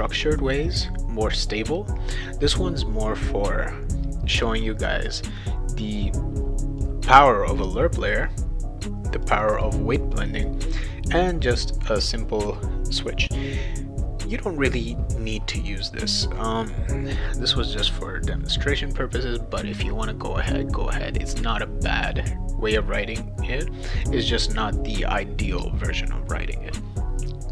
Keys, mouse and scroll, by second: 6.8-8.1 drag, 9.2 click, 9.4 click, 10.3 click.